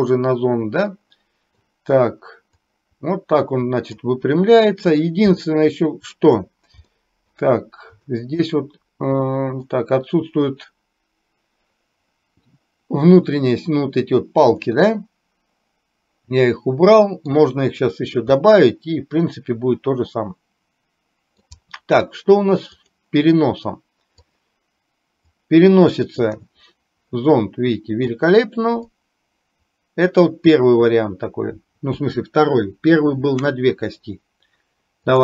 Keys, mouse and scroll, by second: 2.7-4.1 drag, 5.4 middle click, 6.9 shift+middle click, 8.6-9.8 middle drag, 14.7-17.4 middle drag, 18.4-21.6 middle drag, 22.9 click, 24.3 click, 25.4-28.2 drag, 28.9-30.3 drag.